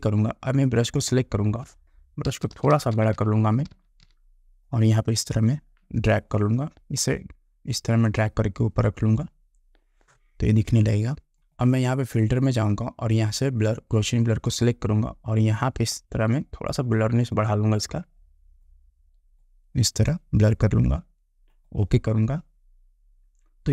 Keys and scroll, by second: 2.4 ].